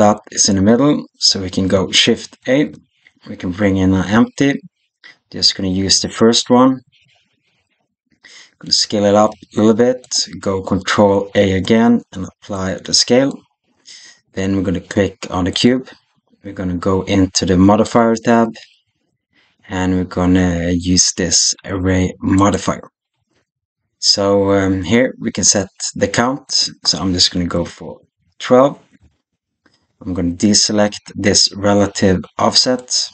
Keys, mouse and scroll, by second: 2.3 shift+a, 7.7-8.5 middle drag, 9.0 s, 11.2 ctrl+a, 15.4 click, 18.9-22.4 drag, 26.3-28.8 drag, 32.5 click.